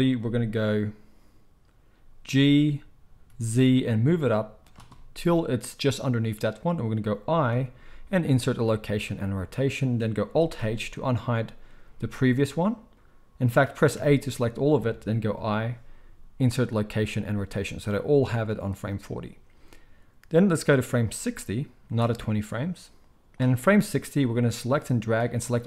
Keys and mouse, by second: 2.2 g, 4.7-20.4 shift+middle drag, 7.5 i, 10.5 alt+h, 13.9 a, 15.3 i, 20.4-25.6 drag.